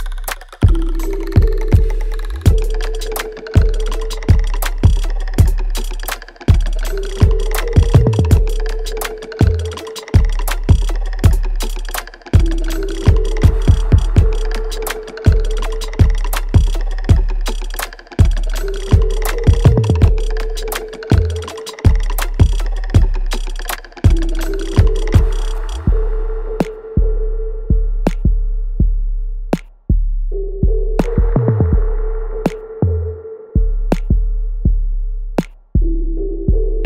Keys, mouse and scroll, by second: 0.2 right click, 0.9 click, 1.2 alt+middle click, 1.7 alt+click, 2.7 alt+middle click, 3.4-8.6 alt+drag, 8.6 alt+middle click, 9.4 alt+right click, 9.8 alt+click, 11.9 alt+middle click, 12.2 alt+right click, 13.3 click, 19.3 click, 21.4 alt+middle click, 21.9 ctrl+z, 22.4 right click, 23.5 click, 24.3 alt+click, 25.5-27.5 right drag, 27.5 alt+click, 28.1 alt+right click, 28.8 ctrl+b, 29.7-32.7 ctrl+drag, 32.7 alt+middle click, 33.1 alt+right click, 33.6 alt+click, 35.7 scroll down 1.